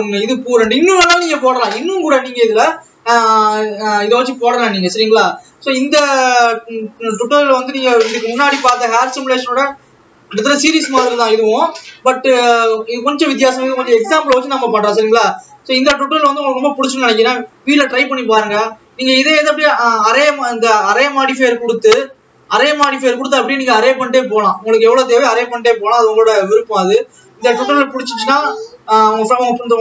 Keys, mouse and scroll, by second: 19.4 scroll down 1, 20.6 click, 22.2 click, 25.7 click.